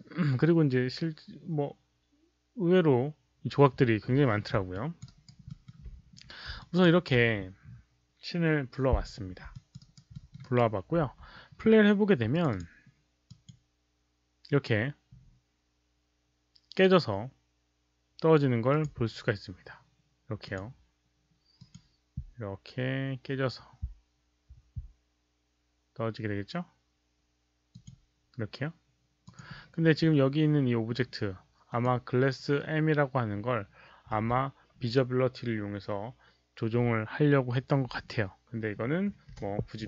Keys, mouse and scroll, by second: 4.7 alt+click, 5.0 alt+right click, 5.4 alt+middle click, 6.5 alt+drag, 7.6 alt+click, 7.6 alt+middle click, 7.6 alt+right click, 9.5 alt+click, 9.7 alt+right click, 10.1 alt+middle click, 10.4 alt+right click, 11.0 q, 12.3 alt+click, 13.2 alt+click, 15.2 click, 15.2 alt+right click, 15.2 q, 16.3 alt+click, 16.3 alt+right click, 16.3 alt+middle click, 16.3 q, 17.4 alt+click, 17.4 alt+right click, 17.4 alt+middle click, 17.4 q, 18.6 click, 18.8 alt+right click, 18.8 alt+middle click, 18.8 q, 20.4 click, 21.5 click, 26.4 click, 27.7 click, 29.2 click, 31.6 click, 34.2 click, 34.2 w, 38.4 click, 38.4 w, 38.5 click, 38.5 w, 39.2 Delete.